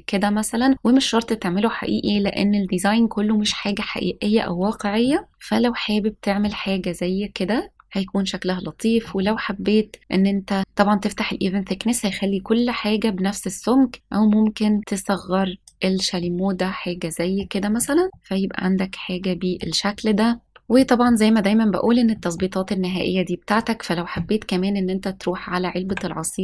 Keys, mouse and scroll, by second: 3.7 click, 5.0-6.4 middle drag, 7.7 middle click, 8.0 scroll down 1, 9.0 middle drag, 9.3 scroll up 1, 13.9-15.6 drag, 16.1-17.3 middle drag, 17.7-19.6 middle drag, 20.4 scroll up 2, 20.7 middle click, 22.1 middle click, 22.7-23.4 scroll up 2, 23.4 click, 25.8 Tab.